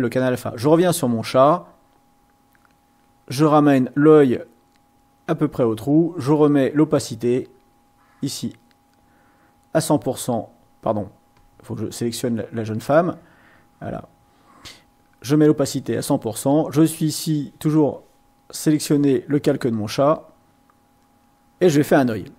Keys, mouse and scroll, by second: 1.7-3.2 drag, 3.7 click, 4.0 click, 4.5 click, 5.2 click, 7.5-10.6 drag, 11.3 click, 12.8-14.8 drag, 16.0 click, 19.5-21.5 drag.